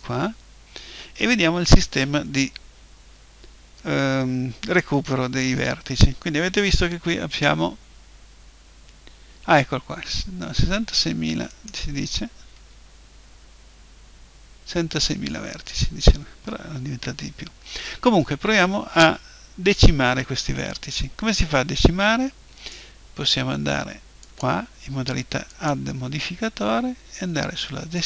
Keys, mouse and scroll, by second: 11.6-13.3 right drag, 12.7 Tab, 24.3-27.4 drag.